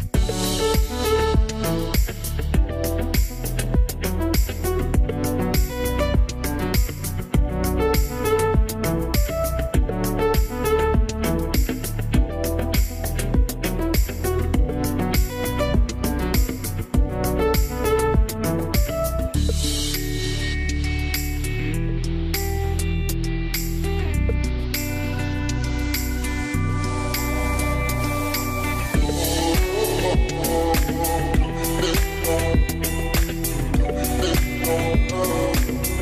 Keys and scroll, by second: 1.3-2.2 typing, 12.6 shift+f, 19.6 space, 31.6-34.2 typing, 35.6 w.